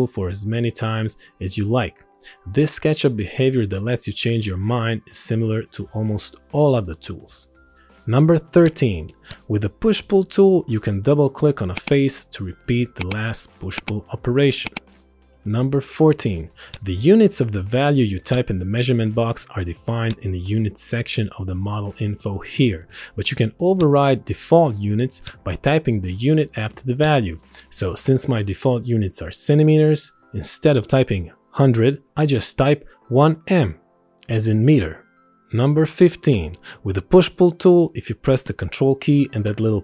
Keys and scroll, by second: 0.4 Return, 1.8 KP_2, 2.8 KP_0, 3.7 Return, 30.7-33.6 typing, 34.4 Return.